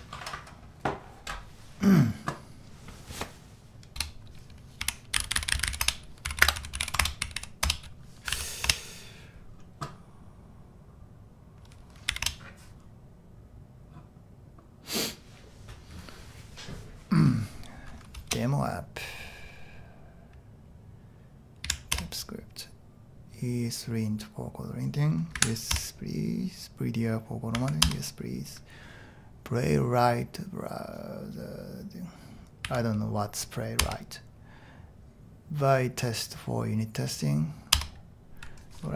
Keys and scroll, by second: 4.0-7.7 typing, 8.8 Return, 12.1 y, 12.2 Return, 18.3 Return, 21.7 Down, 22.0 Return, 25.4 Right, 25.8 Return, 27.6 Tab, 27.9 Return, 32.7 Tab, 33.8 Return, 37.8 Return.